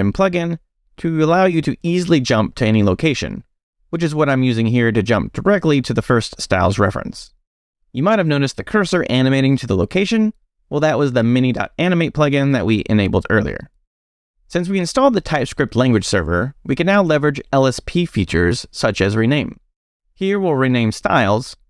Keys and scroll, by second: 3.9 s, 4.9 t, 5.4 f, 17.6 space, 18.9 c, 21.4 r.